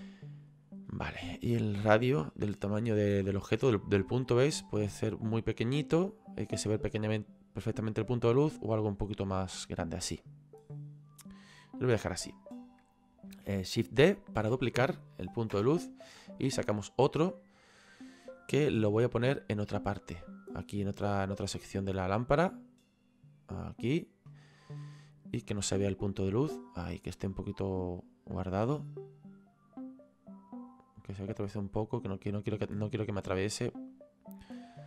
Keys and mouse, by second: 2.3 click, 15.6 Return, 15.6 KP_Enter, 16.4 click, 19.4 click, 25.5 click, 29.1 click, 34.0 click.